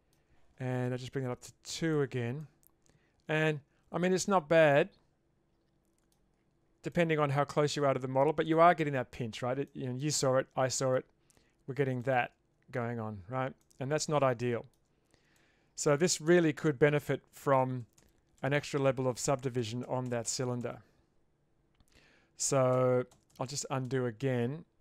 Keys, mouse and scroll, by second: 1.2 click, 2.4-6.1 middle drag, 6.9-8.5 middle drag, 9.7-10.0 shift+middle drag, 10.7 middle click, 12.1 middle click, 12.4 Tab, 13.6-14.2 middle drag, 14.4-14.7 shift+middle drag, 15.4-16.0 middle drag, 16.6 ctrl+z, 17.0 ctrl+z, 17.3 ctrl+z, 17.6 ctrl+z, 17.8 ctrl+z, 18.0 ctrl+z, 18.4 ctrl+z, 18.9 ctrl+z, 19.2 ctrl+z, 19.6 ctrl+z, 19.8 ctrl+z, 20.1 ctrl+z, 20.2 ctrl+z, 20.4 ctrl+z, 20.6 ctrl+z, 22.8 ctrl+z, 23.1 ctrl+z, 23.3 ctrl+z, 23.5 ctrl+z, 23.9 ctrl+z.